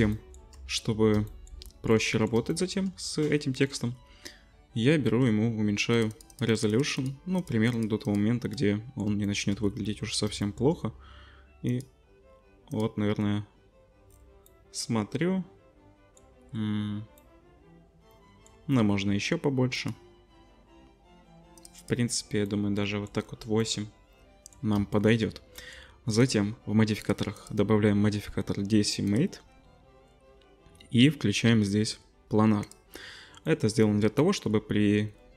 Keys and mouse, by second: 10.7-18.4 drag, 22.5-26.3 drag, 26.3-27.0 middle drag, 27.0 click, 27.1 middle click, 27.3-32.7 drag, 32.7-35.3 middle drag.